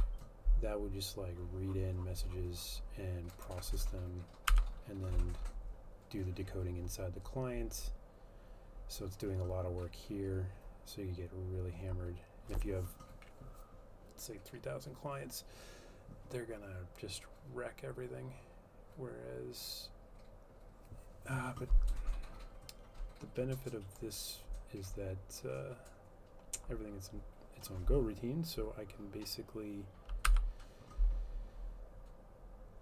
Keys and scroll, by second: 0.1 F12, 4.7 F12, 30.5 F12.